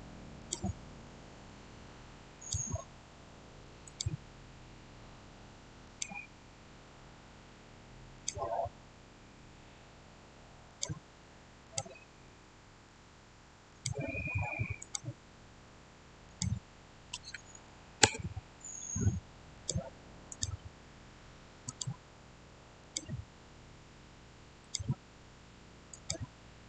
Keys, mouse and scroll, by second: 0.9-2.2 middle drag, 2.2 click, 5.7 click, 8.0 click, 10.6 click, 12.1 scroll down 1, 12.2-13.6 middle drag, 13.6 click, 17.0-17.9 typing, 19.4 click.